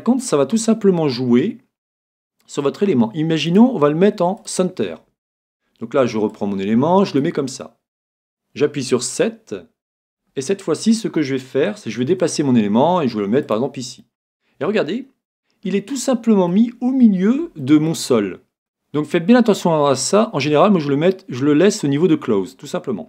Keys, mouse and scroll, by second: 0.9-2.6 middle drag, 3.5-8.2 drag, 7.6-11.7 middle drag, 12.1 g, 13.7-15.4 drag, 14.0-15.9 middle drag, 17.6 middle click.